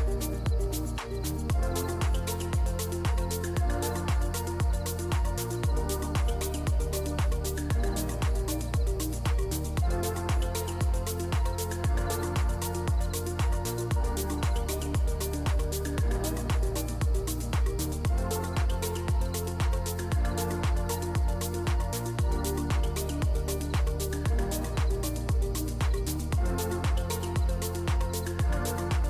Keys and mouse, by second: 0.3 g, 2.1-4.5 drag, 3.3 BackSpace, 3.4 BackSpace, 4.0 0, 5.4 click, 8.4 click, 8.9 click, 11.4 KP_7, 12.2 g, 13.2 shift+d, 14.5 KP_0, 15.4 g, 17.0 g, 22.5 click, 26.5 ctrl+s, 27.5 click.